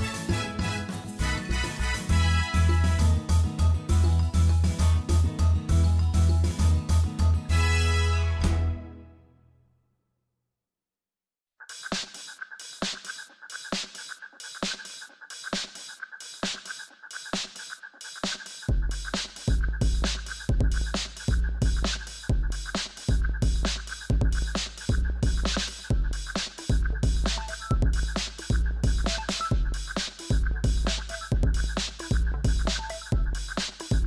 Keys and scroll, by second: 8.3 ., 8.5 3, 8.7 Return, 17.9 shift+z, 20.6 Tab, 23.0 2, 26.5 ctrl+b, 28.5 Tab, 29.2 shift+z.